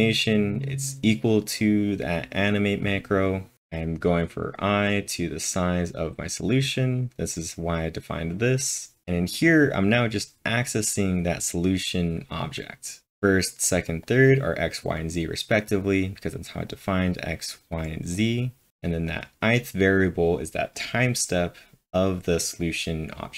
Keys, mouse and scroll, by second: 0.0-0.6 typing, 1.9-6.8 drag, 6.8 click, 7.7 click, 9.0 click, 9.4-12.6 click, 13.1 click, 14.0 click, 16.7-18.2 drag, 16.8-17.5 typing, 18.2 click, 18.7 click, 19.1 click, 20.5-21.3 typing.